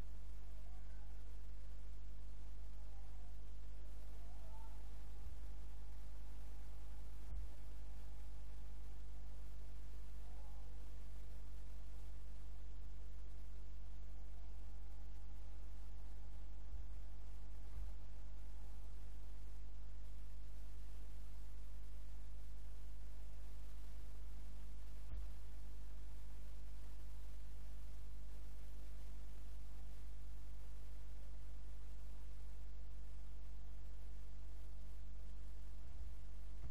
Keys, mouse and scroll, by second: 0.2 click, 2.3 click, 5.3 g, 15.2 click, 16.8 g, 22.2 click, 24.1 g, 34.5 click, 35.9 g.